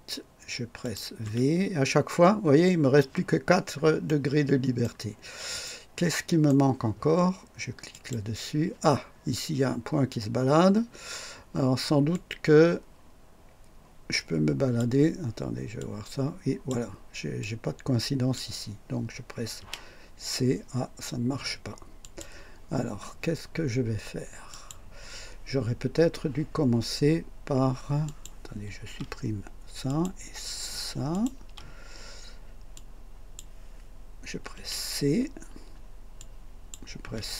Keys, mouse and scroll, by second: 0.8 click, 1.2 v, 3.3-3.7 scroll down 1, 3.5 typing, 4.1-5.0 right drag, 5.1 scroll down 1, 5.6-6.7 right drag, 7.9 click, 12.1 click, 15.8-16.9 drag, 17.4-18.6 drag, 19.6 c, 22.0 click, 24.5 click, 28.1 click, 28.8 Delete, 29.9 click, 31.1 click, 31.4 Delete, 32.7-33.5 drag, 34.5 typing, 36.1-36.9 drag, 37.0 typing.